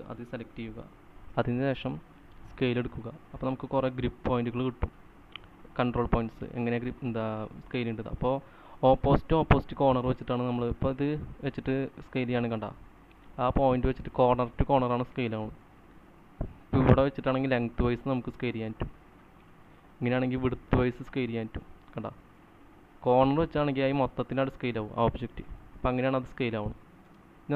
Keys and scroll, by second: 14.4-15.1 typing, 27.2 space.